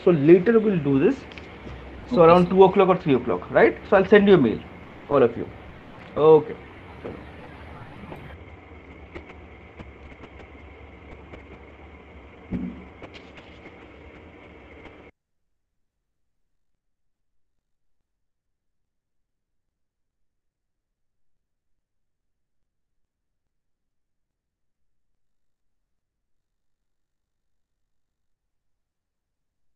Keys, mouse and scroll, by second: 8.8 click, 10.2 click.